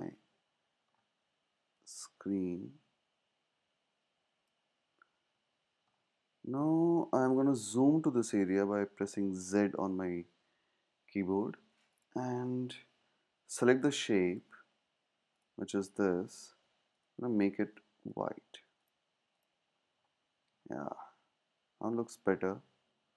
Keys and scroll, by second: 0.1 super+v.